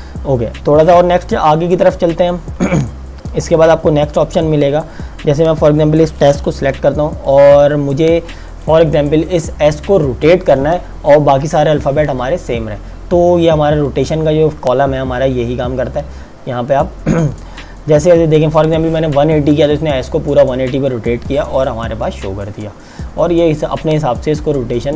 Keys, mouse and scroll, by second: 0.0 click, 0.4 space, 4.4 alt+Num_Lock, 5.2 click, 6.7 t, 7.2 click, 13.9 click.